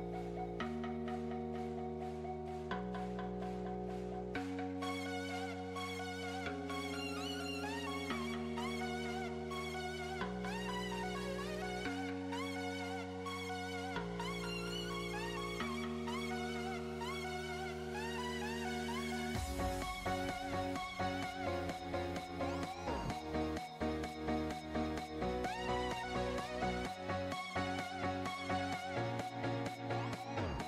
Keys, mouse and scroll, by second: 0.3 click, 4.5 space, 4.6 click, 5.1 click, 5.9 click, 6.2-6.7 scroll down 2, 6.7 click, 6.9-7.9 drag, 9.4 KP_0, 9.6 middle click, 10.1 click, 10.3 shift+d, 10.7 s, 11.5 r, 13.7-14.1 middle drag, 14.1 shift+a, 15.2 alt+g, 15.3 alt+r, 15.6 click, 15.8-17.1 drag, 17.2 click, 17.5-19.1 drag, 19.6 s, 21.0 click, 21.5 ctrl+KP_0, 22.1 s, 22.6-23.6 drag, 24.6 click, 24.8 click, 24.9 click, 25.6-26.6 drag, 26.7 click, 27.1 r, 27.8 click, 28.0 r, 30.4 click.